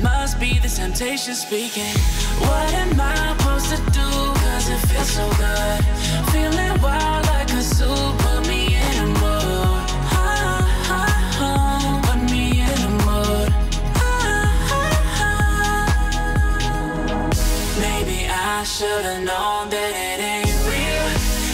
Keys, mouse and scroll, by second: 3.1 alt+scroll up 1, 4.8-8.9 drag, 11.9-19.5 drag, 13.3-14.6 drag, 17.7-19.0 drag.